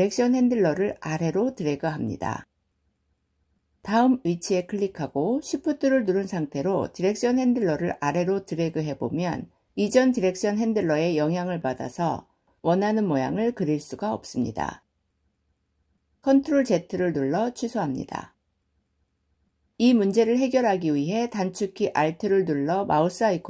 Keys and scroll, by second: 16.3 ctrl+z.